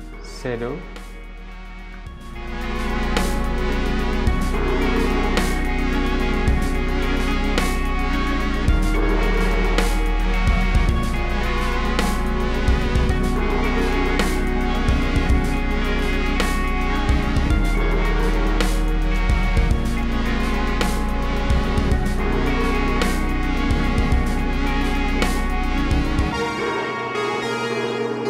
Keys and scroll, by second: 3.6-4.5 typing, 6.3 super+z, 6.5 v, 10.1 5, 10.6 Return, 11.2 super+z, 11.2 super+z, 12.0 super+z, 13.8 super+z, 13.9 super+z, 14.4 BackSpace, 14.8 super+c, 15.0 super+v, 19.0-19.4 typing, 19.6 Return, 21.8 super+z, 24.3-26.8 typing, 27.7 super+z.